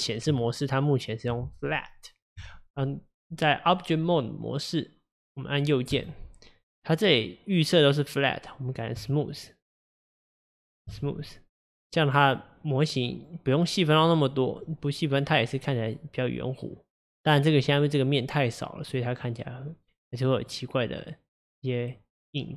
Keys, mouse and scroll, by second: 5.9-9.0 right drag, 9.8 click, 10.3-13.2 right drag, 13.2-14.7 drag, 14.7-17.7 middle drag, 20.4 click.